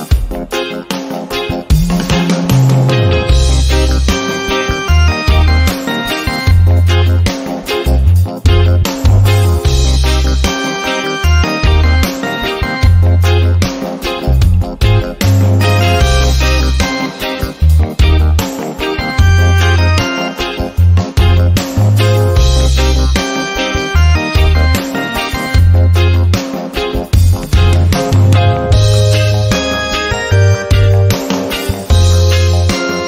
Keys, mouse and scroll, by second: 2.0-3.7 typing, 4.0 Tab, 4.9-6.2 typing, 7.0 click, 10.8-11.6 typing, 12.2-15.5 drag, 24.0-26.5 typing, 27.2 click, 27.8 e, 29.2-30.2 click, 31.0 ctrl+alt+c, 31.2 click, 31.6 ctrl+alt+v, 32.4-33.0 drag.